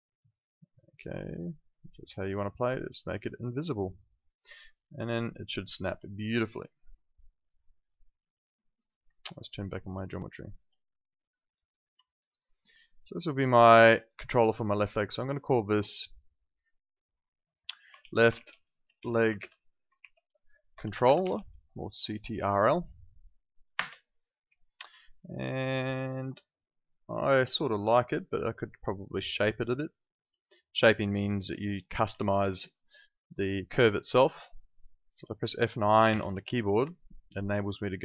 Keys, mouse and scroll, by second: 0.2 click, 3.2 alt+click, 6.0 alt+click, 6.7 alt+middle click, 7.0 alt+click, 7.6 alt+middle click, 7.9 alt+right click, 8.1 alt+click, 10.1 alt+click, 12.0 alt+click, 12.2 alt+right click, 12.5 alt+click, 18.0-21.8 typing, 23.7 Return, 25.1 alt+middle click, 25.4 alt+click, 25.8 alt+middle click, 26.3 alt+click, 32.1 alt+click, 34.8 alt+click, 36.0 F9, 36.8 alt+click.